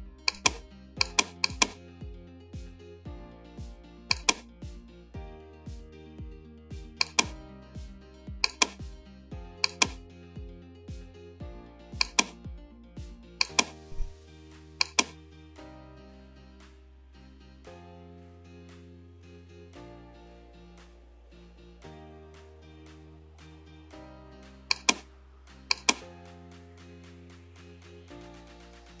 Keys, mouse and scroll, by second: 12.1 click.